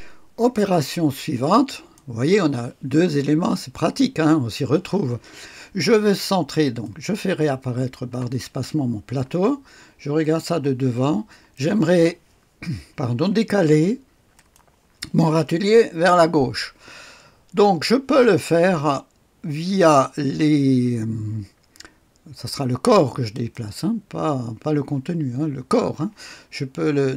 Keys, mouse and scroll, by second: 1.6 click, 6.7 click, 8.0 space, 10.1 click, 10.9-11.4 scroll up 1, 11.4 middle click, 12.0 right click, 14.2 click, 23.2 click.